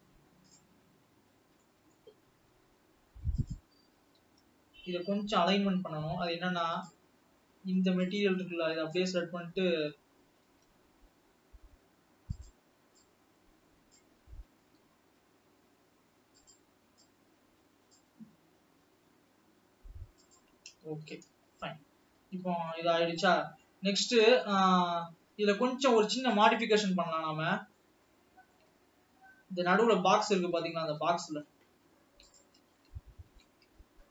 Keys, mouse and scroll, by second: 2.9 s, 4.4 g, 9.2 click, 10.6 g, 14.1 Left, 14.9 g, 18.1 Left, 19.2 g, 21.6-22.6 scroll down 2, 22.6 scroll down 2, 22.9 alt+a, 23.0-24.7 middle drag, 24.7-25.2 scroll up 4, 26.8 click, 28.3 middle click, 29.0-29.8 shift+scroll up 7, 30.0-32.1 middle drag, 32.1 scroll up 4, 32.4 drag, 32.9-34.0 shift+middle drag, 34.0 Tab.